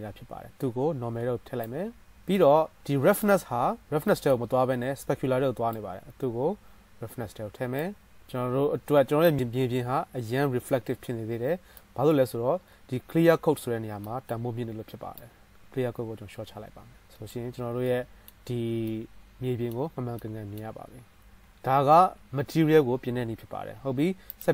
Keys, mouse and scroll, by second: 2.3-5.3 middle drag, 5.3-8.7 drag, 8.1-24.5 middle drag, 8.1 right click, 20.4-20.8 drag, 20.4-20.8 right drag, 21.6 KP_0.